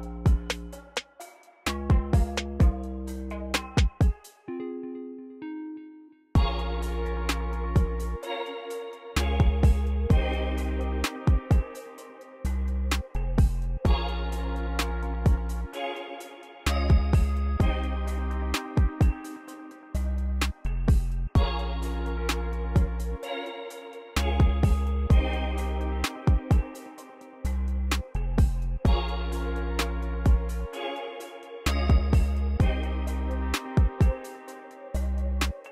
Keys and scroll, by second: 1.9 BackSpace, 2.8 BackSpace, 3.7 BackSpace, 10.2-13.0 typing, 22.5 l, 23.0 super+c, 23.6-24.4 typing, 24.6 super+v, 26.0-27.0 typing, 28.3 u, 29.3 ctrl+super+r, 29.8 c, 30.7 super+a, 31.0 u, 35.3 space.